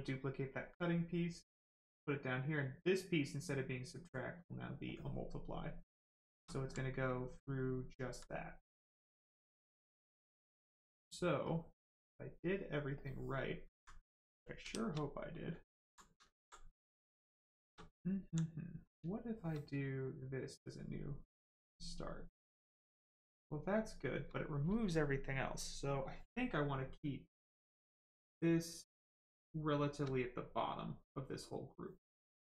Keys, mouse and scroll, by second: 0.5 click, 4.4 click, 5.2 right click, 12.5 click, 13.7 alt+right click, 14.3 shift+right click, 14.6 shift+f, 15.1 right click, 15.7 alt+click, 16.4 alt+right click, 17.1 right click, 20.0 shift+click, 20.9 right click, 27.6 click, 32.3 click.